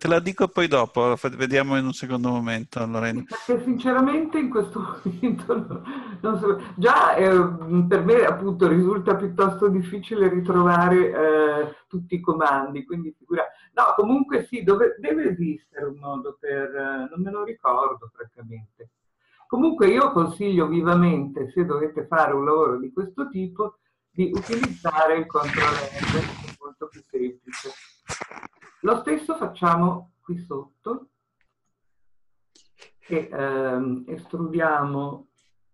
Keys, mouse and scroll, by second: 1.6-5.1 middle drag, 4.6 scroll down 2, 26.3-31.6 middle drag, 31.6 click.